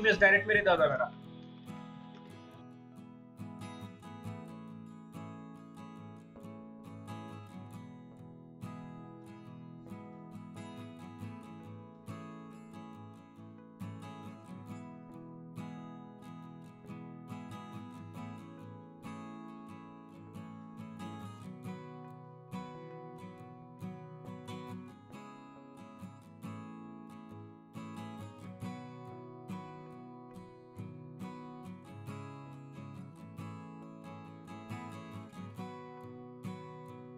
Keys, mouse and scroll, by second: 1.4-7.1 typing, 3.0-3.5 scroll down 2, 3.5-3.9 scroll up 1, 4.4 scroll down 3, 4.6 scroll up 2, 4.9 scroll down 1, 5.4 scroll up 1, 5.8-6.4 scroll down 2, 6.9 scroll down 1, 7.9-8.8 scroll down 7, 10.3-10.9 scroll down 6, 10.9-11.5 scroll down 8, 16.1 ctrl+click, 16.7 ctrl+click, 17.5 ctrl+x, 18.7 double click, 19.3 double click, 19.5-19.9 scroll down 6, 19.9 double click, 24.3 double click, 28.0 double click, 31.1 ctrl+space, 31.3 ctrl+click, 31.9 space, 35.2 space, 35.3 double click, 35.7 space, 35.8 space, 36.3 right click.